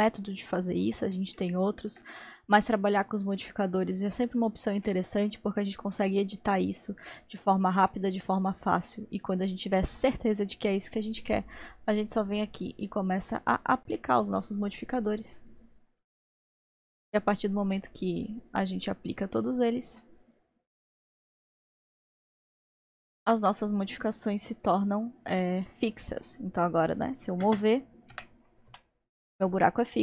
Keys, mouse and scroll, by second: 2.3 click, 6.8 click, 8.9-11.9 middle drag, 12.6-25.4 drag, 25.4-26.9 middle drag, 26.9-28.4 drag, 28.1 g.